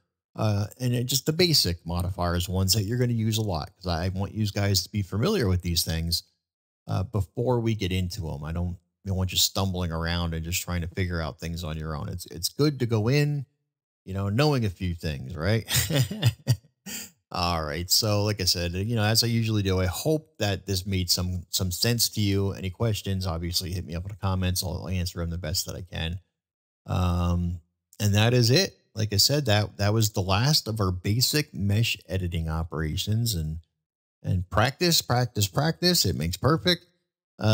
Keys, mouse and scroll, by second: 10.5-10.9 middle drag.